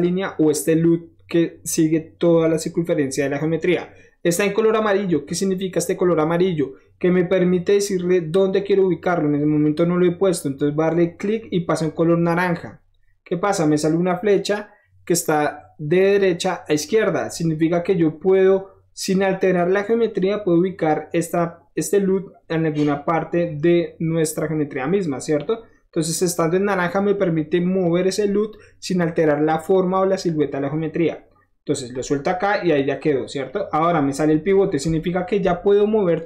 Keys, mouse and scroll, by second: 11.2 click, 31.9 click, 32.4 middle click, 32.6-33.4 scroll up 1, 34.4 middle click, 35.0 shift+middle click.